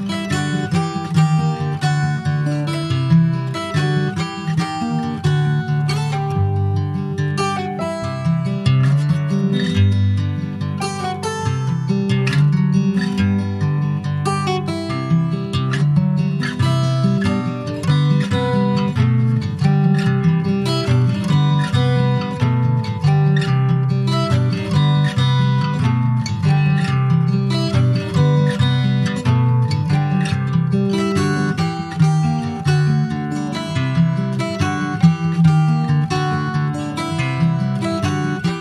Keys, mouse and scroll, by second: 0.3 click, 3.6 click, 3.9 middle click, 4.6 click, 5.6 alt+middle click, 6.2 alt+middle click, 7.4-10.1 drag, 10.1 Tab, 10.4 click, 10.7 middle click, 11.4 ctrl+s, 11.6 scroll down 3, 11.9-13.0 middle drag, 13.0 ctrl+s, 13.1 click, 13.8 alt+middle click, 14.0 alt+z, 15.0 Tab, 15.7 click, 17.1 shift+click, 18.7 s, 23.0 Tab, 23.2 click, 23.5 scroll down 3, 23.6-24.7 middle drag, 24.7 alt+z, 24.9 click, 25.1 middle click, 25.3-26.0 scroll up 2, 25.5 shift+middle click, 26.0 middle click, 26.5 ctrl+s, 26.6 click, 26.8 shift+middle click, 27.0 shift+scroll up 2, 27.2 middle click, 28.0 scroll up 1, 28.2-29.5 shift+middle drag, 29.5 scroll down 1, 29.7-30.8 shift+middle drag, 30.8 ctrl+s, 31.1 shift+middle click, 32.0 ctrl+s, 32.2 shift+middle click, 32.5 scroll up 3, 32.9 ctrl+s, 34.7 middle click, 35.2 click, 35.5 Tab, 35.8 middle click, 36.1 shift+scroll up 1, 36.2 shift+middle click, 36.8 click, 37.5 click, 38.0 middle click, 38.1 scroll up 1, 38.5 middle click.